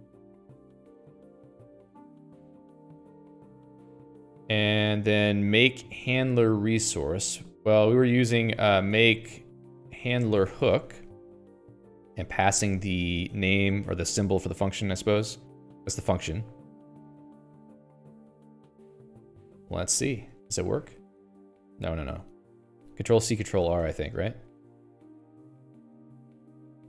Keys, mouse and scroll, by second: 0.0-3.0 typing, 3.7 Escape, 4.1 ctrl+s, 6.3 ctrl+s, 6.7 Escape, 7.1 o, 8.6-13.5 typing, 15.6 ctrl+s, 15.9 Escape, 17.9-20.2 typing, 21.3 alt+x, 21.9 Return, 22.6 Escape, 23.0 ctrl+g, 23.1 ctrl+g, 23.7-24.7 typing, 25.3 ctrl+r.